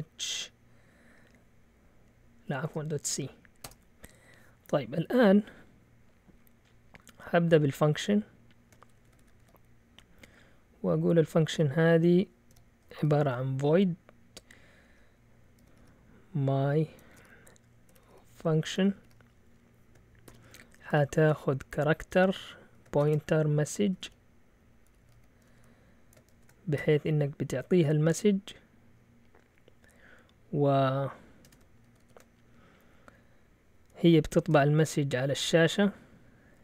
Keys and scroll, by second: 0.0-0.1 typing, 2.7 BackSpace, 3.1 c, 3.6 Return, 8.9 ctrl+w, 9.0 ctrl+w, 9.2 ctrl+w, 11.5-13.5 typing, 14.8-27.2 typing, 31.4 Escape, 31.8 ctrl+w, 32.0 ctrl+w, 34.5 v.